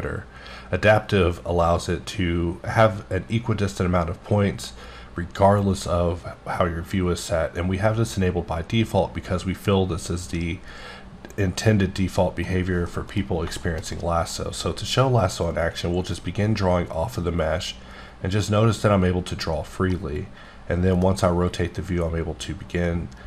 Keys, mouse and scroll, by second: 12.9 middle click, 13.3 scroll up 2, 13.6 shift+middle click, 16.1 click, 19.9 middle click.